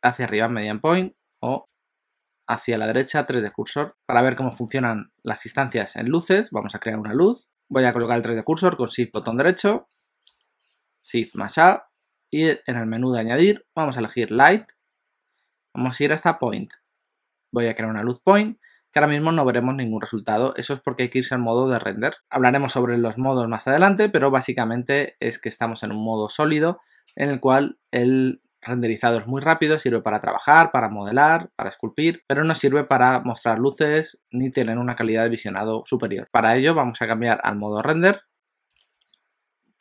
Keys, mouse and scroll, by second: 1.6 ., 3.5 ., 3.9 alt+a, 3.9 middle click, 9.1 shift+right click, 11.2 shift+a, 38.3 click.